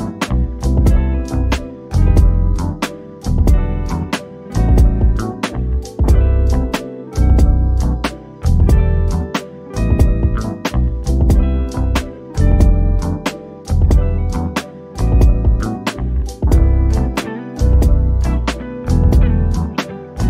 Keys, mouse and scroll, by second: 0.3 click, 2.9-3.7 scroll down 1, 5.3-6.8 scroll up 1, 6.8 click, 16.9 click, 19.6 scroll up 1.